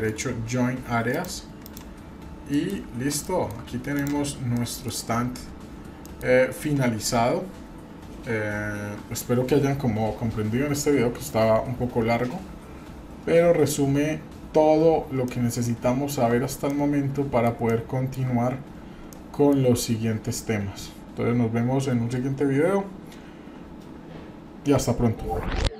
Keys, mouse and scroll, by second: 0.0-1.8 right drag, 2.2-2.5 scroll down 1, 2.5 middle click, 2.8 scroll up 2, 3.2 shift+middle click, 3.9 click, 4.6 middle click, 6.0-6.3 shift+middle drag, 15.3-16.3 shift+middle drag, 16.7 middle click, 17.7 shift+middle click, 19.1 shift+middle click.